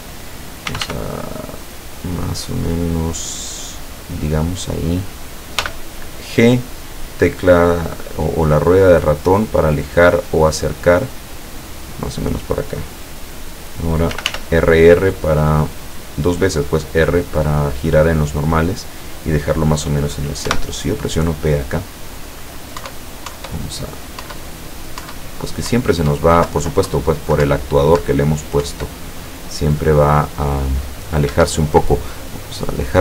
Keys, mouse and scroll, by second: 0.7 r, 4.2 click, 5.7 g, 6.8 middle click, 12.1 click, 14.2 r, 17.9 click, 20.5 p, 22.9 Up, 24.3 Up, 25.0 Up, 25.8 Up, 26.5 Down, 27.5 Up, 28.7 Up, 31.4 Escape, 32.6 click.